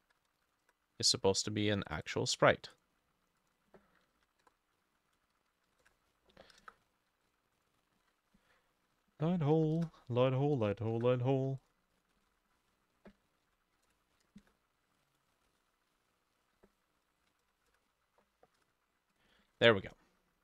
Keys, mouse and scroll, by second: 0.0-1.0 typing, 2.1 double click, 4.2 Right, 4.2-6.6 drag, 4.5 BackSpace, 4.6 1, 4.8-5.9 ctrl+shift+middle drag, 5.1 Left, 5.7 typing, 5.9 ctrl+c, 6.6 Return, 6.7 Return, 7.6 double click, 8.0 ctrl+alt+e, 9.0 ctrl+v, 9.6 2, 9.8 Return, 11.0 Return, 12.0 double click, 12.3 ctrl+alt+e, 13.7 ctrl+v, 13.8 3, 13.9 Return, 14.5 Return, 14.5-18.3 drag, 15.5 alt+c, 15.5 middle click, 15.6 ctrl+alt+e, 16.4 ctrl+middle click, 16.8 ctrl+v, 17.3 4, 17.5 Return, 17.7 Return, 18.6 Return, 19.5 ctrl+s.